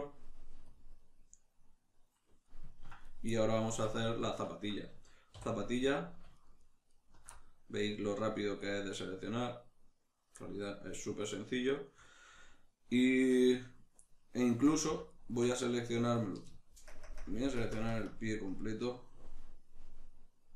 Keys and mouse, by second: 2.5-3.1 ctrl+middle drag, 3.1 right click, 3.7 Tab, 3.7-5.9 middle drag, 5.3 3, 5.9 alt+right click, 6.4 alt+shift+right click, 6.6 alt+shift+right click, 6.9 alt+shift+right click, 7.3-15.0 middle drag, 15.0 alt+shift+right click, 15.6-20.5 middle drag, 16.9 ctrl+KP_Add.